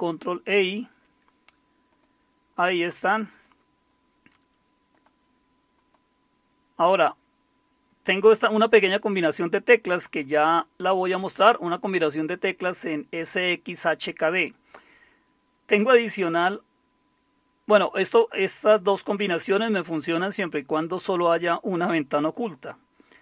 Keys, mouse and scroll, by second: 1.9 click, 3.3 click, 4.9 click, 6.9 click.